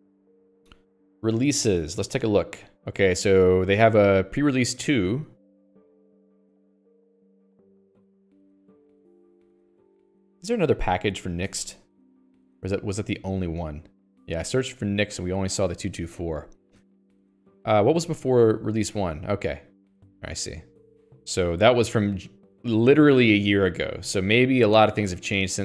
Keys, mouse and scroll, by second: 10.0 Return, 11.6 click, 11.8 Escape, 12.7 click, 13.0 Escape, 13.2 scroll up 1, 13.7-14.5 scroll up 18, 14.5-14.8 scroll down 10, 15.4-16.0 scroll down 4, 16.0 scroll, 16.2-16.8 scroll down 21, 16.8-17.1 scroll up 14.